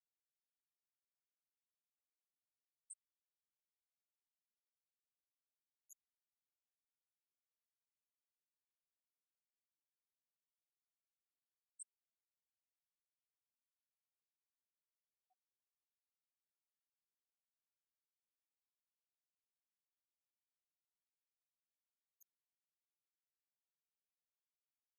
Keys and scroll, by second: 20.2 BackSpace, 20.8 4, 24.0 Return.